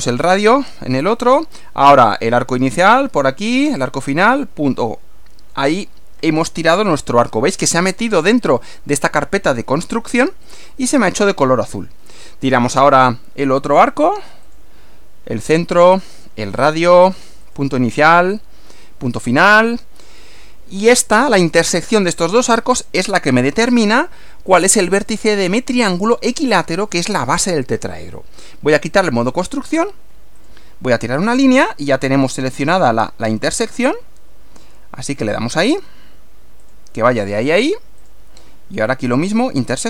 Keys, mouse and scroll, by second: 0.1 click, 2.6 click, 3.7 click, 8.5 click, 10.4 click, 12.8 click, 14.5 click, 16.2 click, 17.4 click, 19.3 click, 29.3 click, 30.4 click, 35.2 click, 36.6 click, 38.0 click.